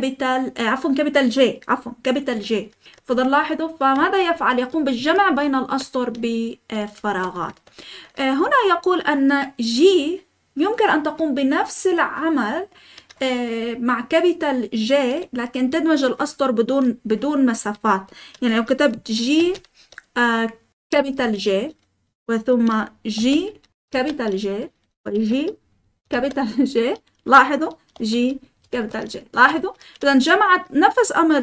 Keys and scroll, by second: 2.9-5.1 typing, 7.0 Escape, 7.3-8.3 typing, 19.3 g, 20.6-21.3 typing, 23.1-23.9 typing, 25.1-26.0 typing, 27.9-29.5 typing, 29.3 Escape.